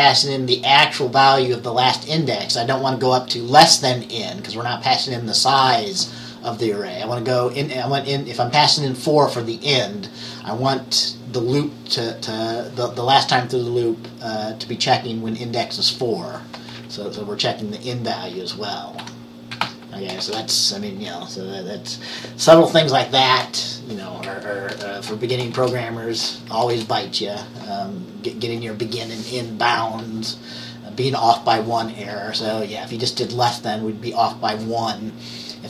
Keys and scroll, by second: 19.1-20.3 typing, 24.8 Return, 25.6 {, 26.8 Return.